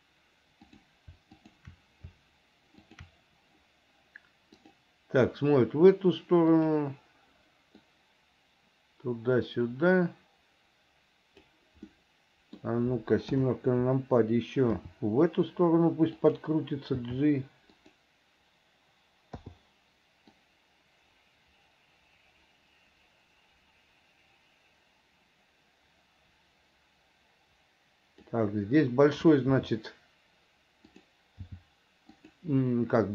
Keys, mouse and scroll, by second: 3.0 shift+click, 4.8 click, 6.8 click, 8.1-11.7 drag, 12.1 middle click, 13.5 KP_7, 15.0 r, 17.2 g, 19.6 i, 20.6-28.5 drag, 29.7 r, 31.6 g.